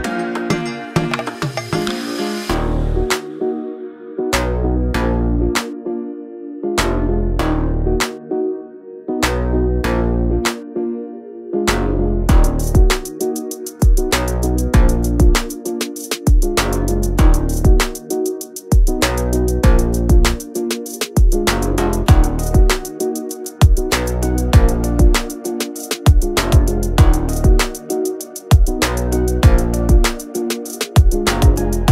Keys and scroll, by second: 1.6 m, 2.3 Up, 4.1 Up, 4.9 2, 5.2 Return, 5.5 space, 5.8 f, 6.7 ctrl+z, 7.4-9.5 typing, 7.7 Return, 9.3 Return, 18.9 r, 20.6-24.6 typing, 24.1 Return, 26.1 m, 27.1 Right, 27.4 Left, 29.6 l, 30.6-31.9 typing.